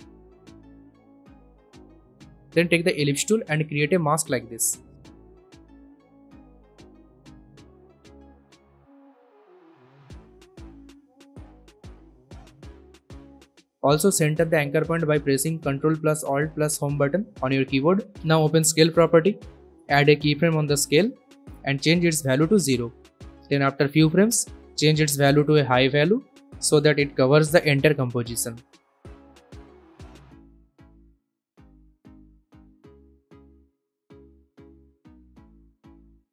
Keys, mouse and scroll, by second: 1.2-2.3 typing, 2.4 Return, 4.2-6.7 drag, 7.1 v, 7.5-10.3 drag, 14.5 s, 15.6 click, 16.2 alt+Home, 18.0 click, 18.7 s, 21.3 click, 23.0 0, 23.3 Return, 24.6-25.2 drag, 29.5-30.1 scroll down 1, 30.1-30.7 drag, 32.7 space, 34.6-36.1 drag.